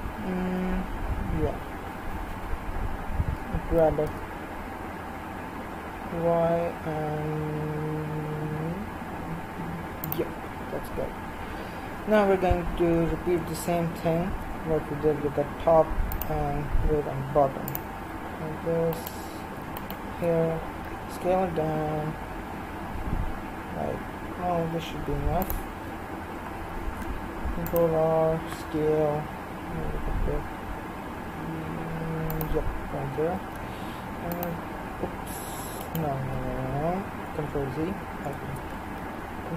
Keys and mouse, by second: 3.8 g, 11.3 KP_1, 14.3 ctrl+r, 18.9-21.9 right drag, 21.0 s, 26.8 ctrl+r, 33.4 ctrl+r, 36.4 ctrl+z, 39.0 ctrl+r.